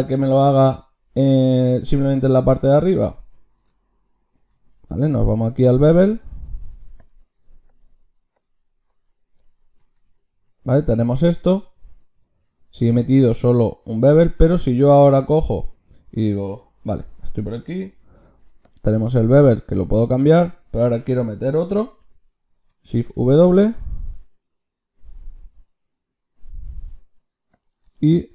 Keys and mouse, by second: 4.2 ctrl+shift+q, 8.2-14.2 drag, 12.2 ctrl+z, 14.1 Tab, 14.8 Tab, 16.8 Tab, 17.8 ctrl+shift+q, 27.0-28.3 middle drag.